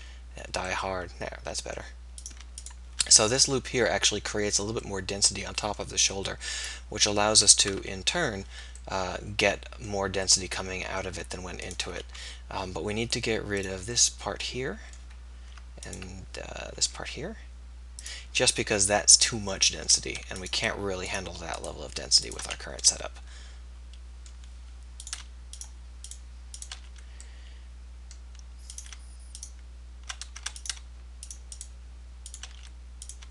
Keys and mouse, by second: 0.2 f, 3.4-5.1 middle drag, 6.6-9.0 middle drag, 12.2 x, 16.9 x, 19.8 middle click, 22.5 f, 23.4 click, 27.3-28.9 drag, 27.3 f, 32.6 f.